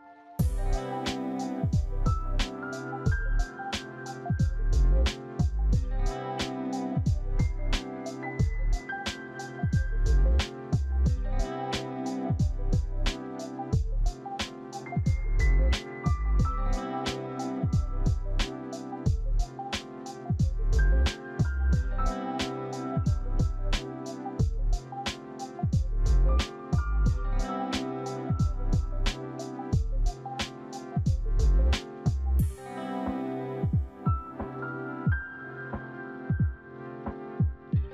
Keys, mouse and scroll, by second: 1.9 alt+shift+middle click, 3.9 alt+shift+middle click, 4.0 alt+shift+middle click, 4.1 alt+shift+middle click, 6.4 alt+shift+middle click, 6.5 alt+shift+middle click, 6.7 alt+shift+middle click, 7.4 alt+shift+middle click, 8.2 alt+shift+middle click, 8.9 alt+shift+middle click, 9.0 alt+shift+middle click, 9.8 alt+shift+middle click, 10.1 alt+shift+middle click, 10.6 alt+shift+middle click, 10.8 middle click, 11.4 middle click, 12.1 shift+middle click, 12.7 middle click, 13.7 alt+shift+middle click, 19.9 ctrl+d, 20.0 c, 21.4 ctrl+d, 26.9 shift+f, 27.1 shift+f, 28.6 middle click, 31.7 right click, 32.1 double click, 34.6 middle click, 36.6 alt+shift+click.